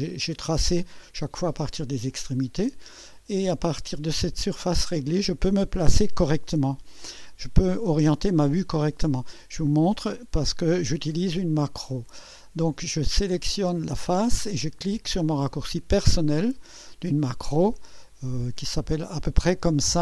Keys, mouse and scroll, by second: 4.5-5.2 drag, 13.1 click, 14.2 click.